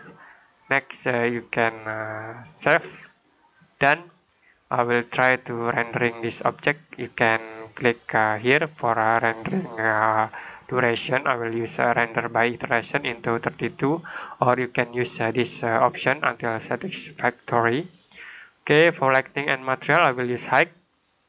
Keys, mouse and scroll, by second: 2.4 click, 5.8 click, 6.1 click, 16.4 click.